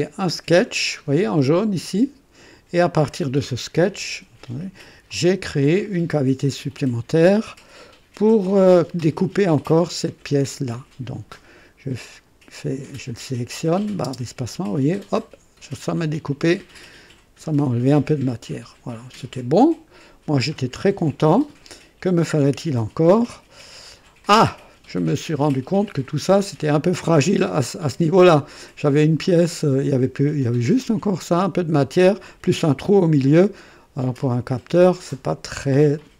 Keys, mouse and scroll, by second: 1.8 click, 3.9 &, 5.1-6.4 drag, 5.8 right click, 6.2 typing, 6.6-9.2 drag, 12.7 click, 14.0 space, 15.8-18.9 drag, 18.9 click, 24.2-25.8 drag, 26.6-27.1 right drag, 29.4 click, 31.4 click, 34.8-36.1 drag.